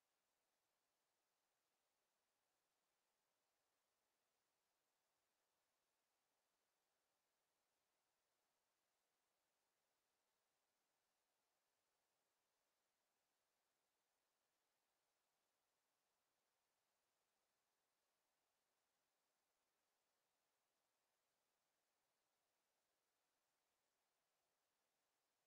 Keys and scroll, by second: 23.0 w.